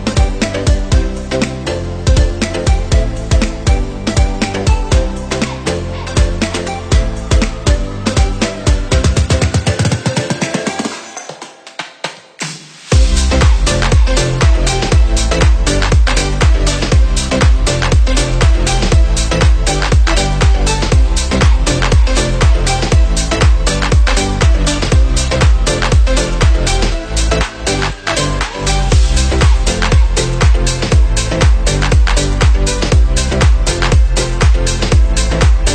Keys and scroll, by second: 0.6 ctrl+=, 18.8 ctrl+c, 19.2 ctrl+v.